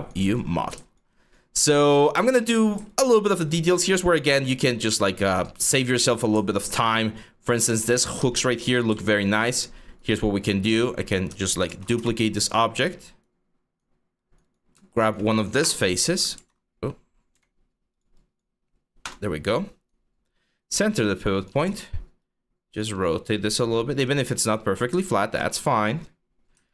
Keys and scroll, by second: 11.3 ctrl+g, 11.6 w, 15.2 BackSpace, 16.0 ctrl+z, 17.0 x, 18.7 BackSpace, 21.3 e, 25.1 w.